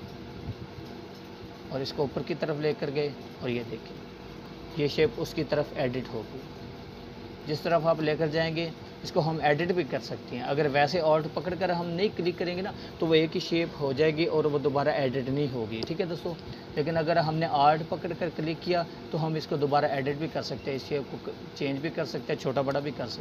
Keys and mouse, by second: 17.6-19.9 drag.